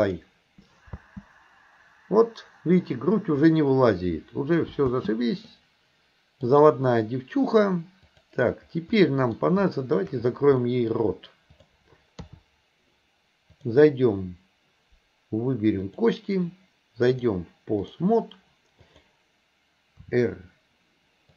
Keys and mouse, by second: 1.0 space, 5.0 space, 5.5-6.5 middle drag, 8.2 click, 9.0 middle click, 9.7 shift+middle drag, 10.7 middle click, 11.7 click, 12.3 KP_3, 13.7 click, 15.9 click, 17.3 click, 18.9 click, 20.1 r.